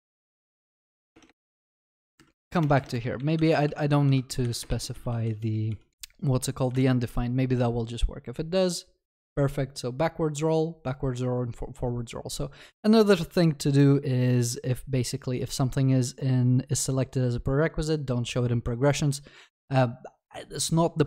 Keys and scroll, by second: 5.9 ctrl+s.